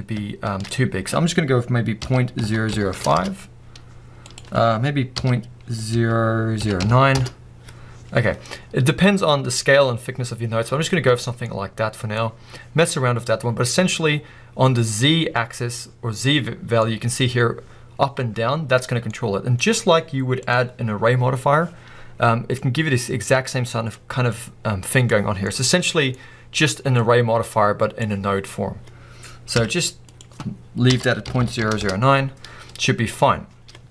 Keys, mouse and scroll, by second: 3.2 0, 3.3 Return, 7.1 click, 7.2 Return, 8.6-10.5 scroll down 2, 10.5-11.3 scroll down 1, 10.7-11.3 middle drag, 11.4 middle click, 11.6 middle click, 12.2 scroll up 2, 13.7 scroll down 1, 16.8 middle click, 19.6 scroll up 1, 22.9-25.1 drag, 25.3 scroll down 2, 25.4-26.1 middle drag, 26.1-27.2 scroll up 2, 27.2 click, 29.5 BackSpace, 31.8 0, 32.3 Return, 32.9-33.9 middle drag.